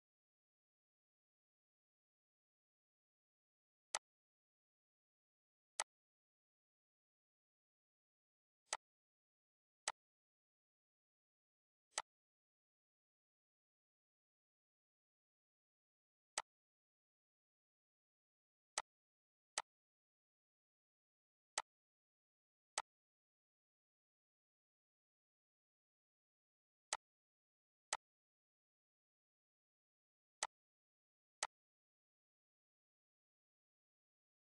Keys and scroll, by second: 1.4 ctrl+d, 11.8 ctrl+d, 24.4 ctrl+d, 31.3 1, 31.5 Return.